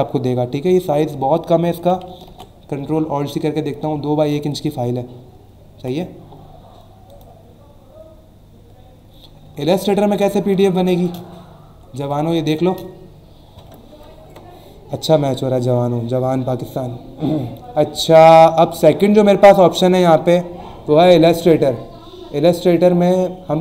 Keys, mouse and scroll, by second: 0.7 click, 2.3 ctrl+alt+c, 5.8 Escape, 7.1 click, 9.5-10.1 alt+scroll down 2, 10.6 space, 10.7 click, 11.1 space, 11.4 alt+scroll up 1, 12.0 space, 12.1 click, 12.5 space.